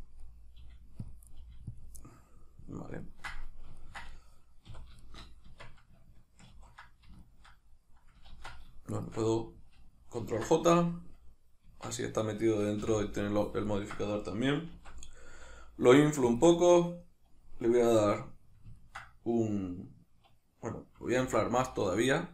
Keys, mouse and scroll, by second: 0.0 click, 0.2 middle click, 0.5 g, 1.1 click, 1.3 right click, 1.4 g, 1.8 click, 2.0-8.5 middle drag, 4.7 a, 5.5 Tab, 6.5 ctrl+2, 8.3 ctrl+z, 8.9 shift+right click, 10.2 ctrl+j, 11.7 Tab, 12.4 right click, 12.8 l, 13.7-16.4 ctrl+middle drag, 14.8 alt+s, 16.4 shift+click, 16.7-21.2 middle drag, 21.2 alt+s.